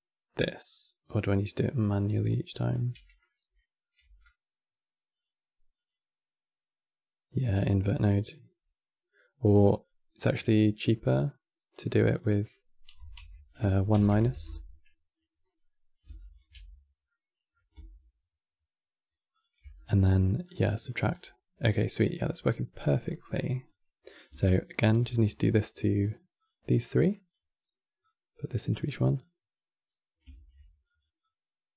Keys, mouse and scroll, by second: 0.4 click, 3.0 middle click, 3.7 q, 7.3-13.8 drag, 13.8 BackSpace, 15.3 click, 16.8-19.0 middle drag, 19.0 ctrl+shift+click, 19.5-20.1 middle drag, 20.1-20.8 drag, 20.8 scroll down 3, 21.8 middle click, 22.5 scroll down 3, 22.7-23.3 middle drag, 23.3-24.5 drag, 24.5 shift+d, 26.5-27.8 drag, 28.9 click, 30.0 shift+d, 30.9-31.7 drag.